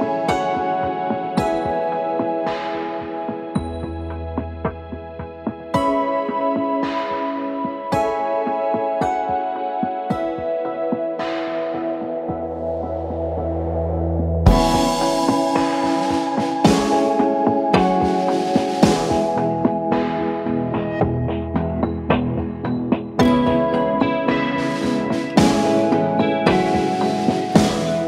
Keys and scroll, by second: 3.3 space, 3.6 Escape, 12.4 c, 12.6 e, 15.4 c, 15.6 e, 17.8 c, 18.0 e, 19.7 e, 21.0 c, 21.1 e, 21.4 Escape, 21.8 F2, 26.2 ctrl+r, 27.8 Escape.